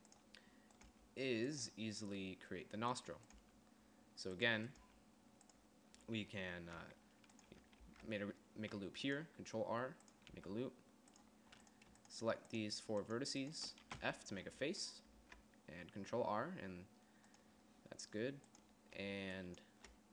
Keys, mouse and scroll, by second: 1.4 g, 3.9 g, 5.4 g, 8.4 ctrl+r, 10.9 g, 14.5 f, 15.7 ctrl+r.